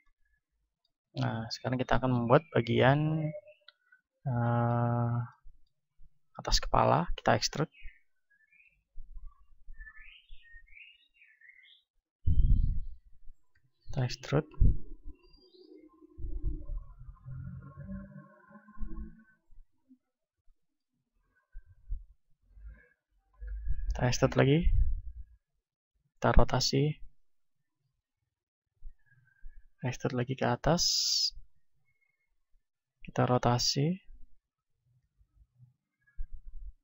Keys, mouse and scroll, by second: 0.0-2.1 middle drag, 1.4 ctrl+Tab, 2.1 ctrl+Tab, 2.7-4.8 right drag, 5.4-7.1 middle drag, 7.1 e, 8.0-13.5 drag, 8.6 s, 10.8 r, 13.5 e, 14.3-16.4 drag, 16.0 r, 16.5-21.8 drag, 17.3 s, 21.8 middle click, 21.8 r, 22.8-26.1 drag, 23.4 e, 25.8 r, 26.8-30.0 drag, 27.4 s, 29.7 e, 30.3-33.6 drag, 33.6 r, 34.2-36.8 drag, 36.5 s.